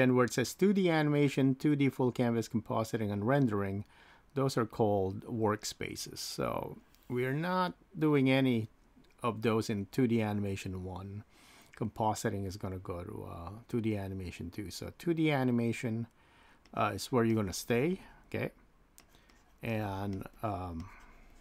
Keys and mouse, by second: 6.4-8.3 drag, 16.7 click, 17.3-20.8 drag, 20.8 click, 21.3-21.4 drag.